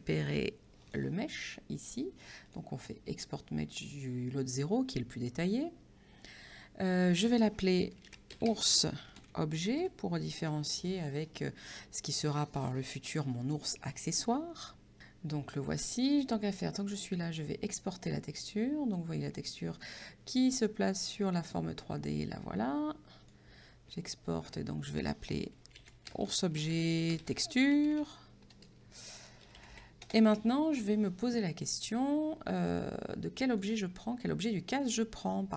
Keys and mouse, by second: 0.8 click, 2.5 click, 7.6-10.3 typing, 10.4 Return, 10.4 KP_Enter, 16.1 click, 23.2 click, 25.3-30.3 typing, 32.7 click.